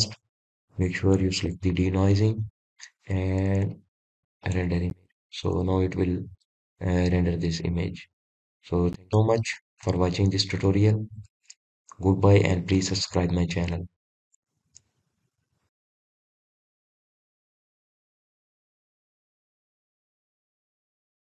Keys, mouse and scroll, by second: 10.6-18.2 shift+middle drag.